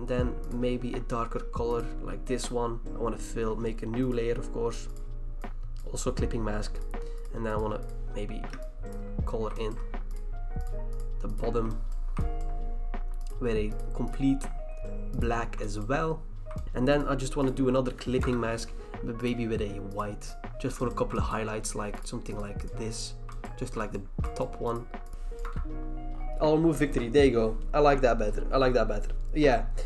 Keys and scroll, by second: 18.2 v, 18.2 BackSpace, 26.0 BackSpace.